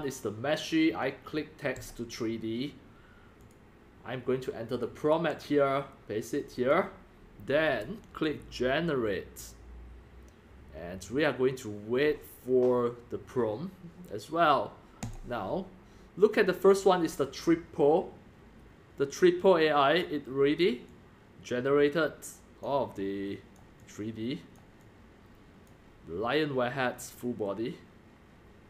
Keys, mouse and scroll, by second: 0.9 drag, 1.7 click, 1.8 click, 3.4 click, 4.8 click, 4.8 click, 5.1 ctrl+v, 6.7-8.4 drag, 9.2 click, 9.4 click, 9.6 click, 9.8 click, 10.2 click, 11.2 click, 15.0 click, 15.1-16.8 drag, 20.0-20.5 drag, 20.6 drag, 20.8-22.6 drag, 22.9-23.4 drag, 23.8-24.4 drag, 24.8-25.6 drag, 27.1-28.6 drag.